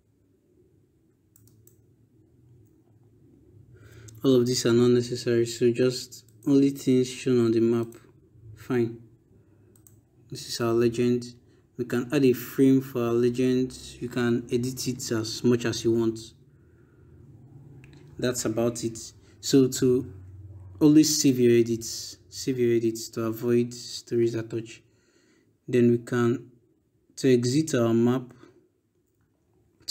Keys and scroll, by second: 21.2 ctrl+s.